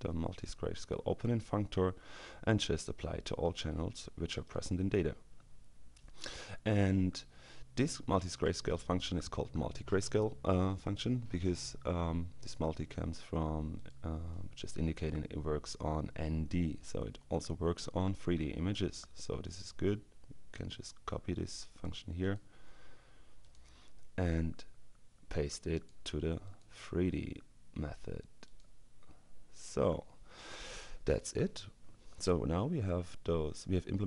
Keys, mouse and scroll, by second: 4.3 click, 8.2 click, 13.8 click, 20.3-22.4 drag, 22.3 right click, 23.4 click, 24.2-26.1 drag, 28.6 click, 29.6 click.